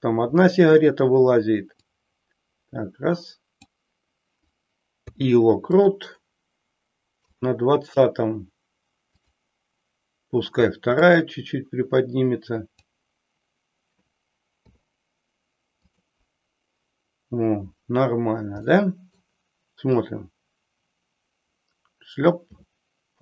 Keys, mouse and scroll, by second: 1.9-3.6 drag, 7.4 click, 9.1 click, 11.1-12.8 drag, 14.5 i, 18.6-19.2 middle drag, 20.0-23.2 drag.